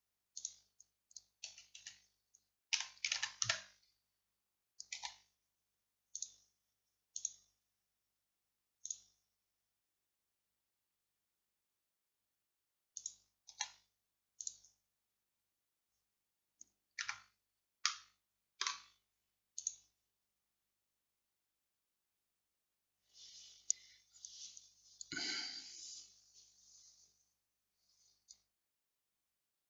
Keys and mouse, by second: 1.5 a, 1.9 a, 2.8 r, 5.0 g, 7.2-13.6 drag, 13.6 g, 17.1 Tab, 17.9-29.6 drag.